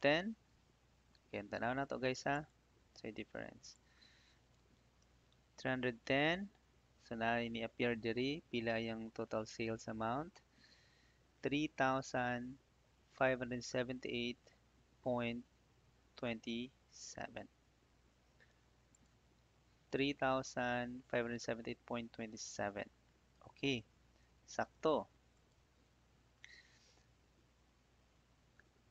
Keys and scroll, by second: 0.3 ctrl+c, 4.2 ctrl+f, 4.9 Return, 7.6 Escape, 8.2 Right, 20.4 Tab.